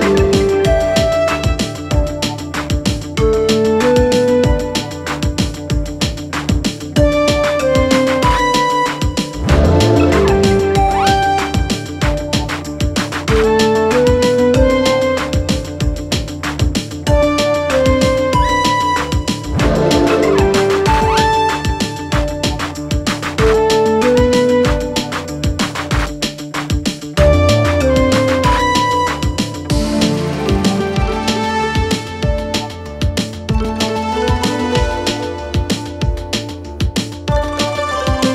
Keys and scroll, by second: 8.9-10.1 typing, 16.8 s.